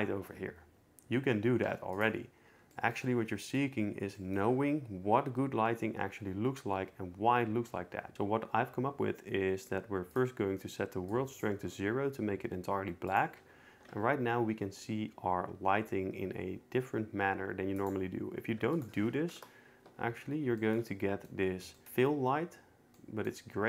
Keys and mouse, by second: 1.7 x, 2.7 shift+middle drag, 3.0 click, 11.2 click, 13.1 click, 14.0 g, 18.9 click, 23.0 middle click.